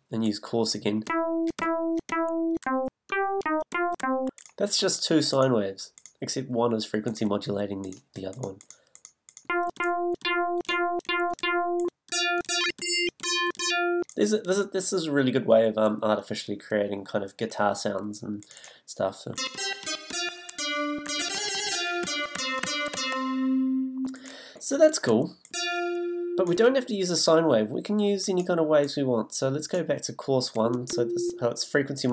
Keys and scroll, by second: 1.1 d, 2.6 a, 9.4 f, 19.3 a, 19.8 e, 20.9 s, 25.5 f, 30.6 f.